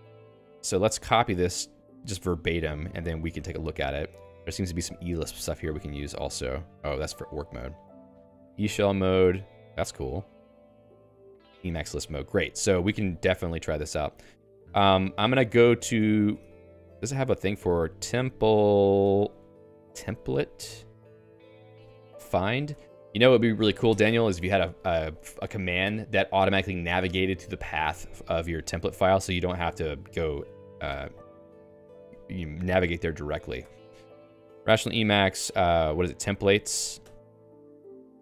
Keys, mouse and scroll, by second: 12.9 Escape, 15.8 ctrl+f, 16.6 ctrl+g, 16.9 alt+x, 17.5-23.1 typing, 24.0 Delete, 27.0 BackSpace, 28.2 Down, 28.6-29.5 Down, 29.7 Down, 30.3 Up, 30.5 Up, 30.9 ctrl+g, 31.6 ctrl+f, 33.6 BackSpace, 34.6 /, 36.0-37.3 typing.